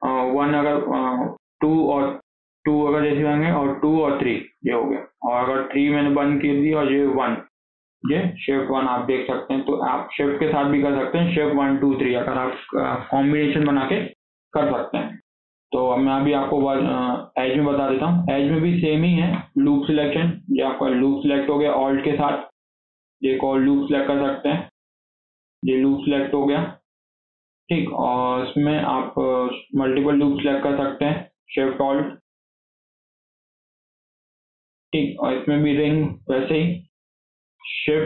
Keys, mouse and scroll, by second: 0.2 shift+1, 1.4 shift+2, 5.7 shift+3, 7.1 shift+1, 9.6 scroll up 2, 9.8-13.0 shift+middle drag, 14.5 scroll down 2, 14.8 shift+middle click, 15.2 scroll up 1, 15.5 shift+middle click, 16.5 2, 18.4-20.8 shift+middle drag, 20.8 alt+click, 22.1 scroll down 1, 22.3 shift+middle click, 22.6 scroll up 2, 22.9-24.1 shift+middle drag, 24.1 scroll down 1, 24.7 alt+click, 25.2 shift+scroll down 1, 25.3-28.7 shift+middle drag, 28.7 scroll up 2, 28.9-31.5 shift+middle drag, 31.5 alt+shift+click, 31.9 alt+shift+click, 32.5 alt+shift+click, 32.9 alt+shift+click, 33.2 scroll down 2, 33.4 shift+middle click, 33.7 click, 34.2-36.8 shift+middle drag, 36.8 scroll up 1, 37.0-38.0 shift+middle drag.